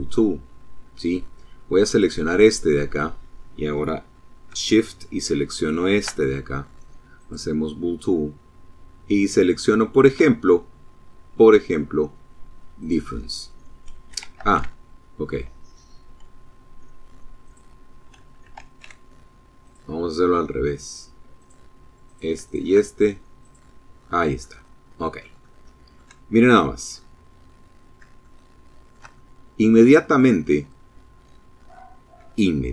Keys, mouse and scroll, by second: 0.6 click, 4.3 shift+click, 5.3-8.8 drag, 11.6 click, 13.2 ctrl+z, 16.2 click, 17.4 ctrl+z, 18.4 click, 20.2 click, 20.8 click, 21.2 shift+click, 22.2 click, 23.2 click, 24.2 shift+click, 25.3 middle click, 25.8-27.0 drag, 27.0 shift+click, 28.0-32.3 shift+drag.